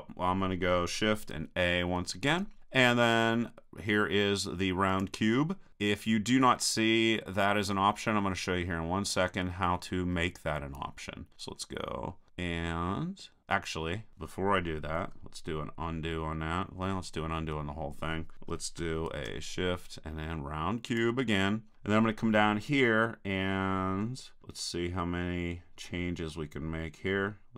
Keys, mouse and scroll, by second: 2.2 shift+a, 8.2-11.4 middle drag, 11.4-12.8 drag, 15.0 super+z, 16.8 super+z, 19.1 shift+a, 24.0-27.5 middle drag, 24.0-25.4 scroll down 1, 25.4 scroll down 1, 25.4-26.4 scroll up 1.